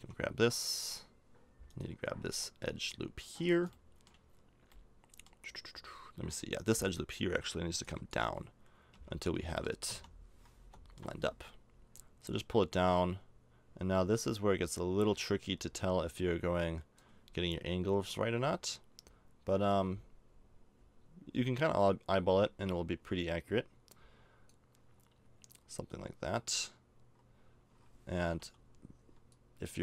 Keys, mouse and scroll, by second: 4.4-7.7 middle drag, 7.7 b, 8.9 KP_1, 9.4 KP_3, 9.8 KP_5, 19.7-24.5 drag, 25.1-29.3 middle drag, 29.3-29.8 drag.